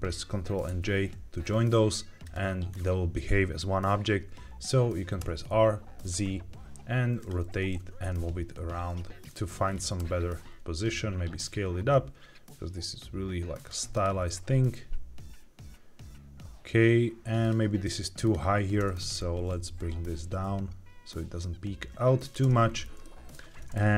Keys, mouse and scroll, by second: 0.6 ctrl+j, 2.1 click, 2.6 scroll down 2, 5.1 r, 5.4 z, 7.1 click, 7.3 g, 7.7 shift+z, 9.2 click, 9.2-9.5 scroll down 3, 9.5-10.2 scroll down 3, 9.9 s, 13.8 click, 14.2 s, 17.3-18.7 drag, 18.7 Tab, 19.5 g, 19.7 z, 22.1 click, 22.3 Tab, 22.6-23.2 scroll down 3, 22.9 middle click.